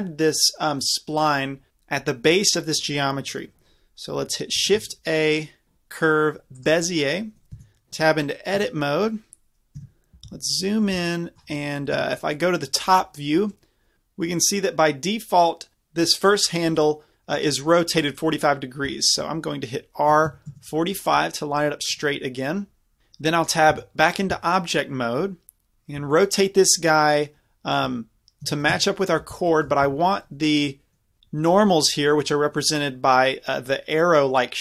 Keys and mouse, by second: 4.6 shift+a, 7.6 Tab, 8.5 KP_5, 9.8 KP_Decimal, 10.0 middle click, 10.3 z, 11.0 z, 11.9 KP_7, 16.7-18.7 drag, 18.9 r, 23.7 Tab, 24.6-25.7 middle drag, 26.0 r, 29.8 Tab.